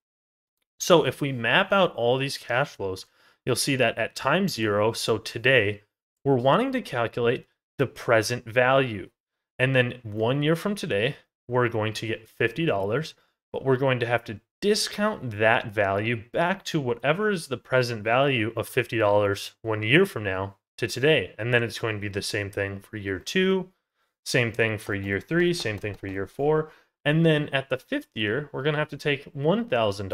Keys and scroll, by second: 0.7 ctrl+z, 5.7 ctrl+z.